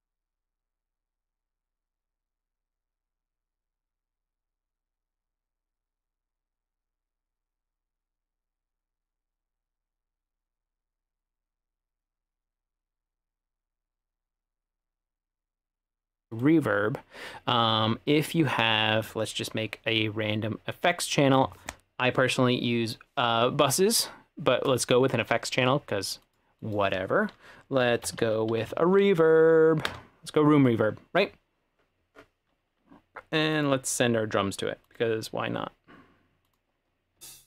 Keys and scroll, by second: 27.7-29.2 typing, 29.9 Return, 37.2 space.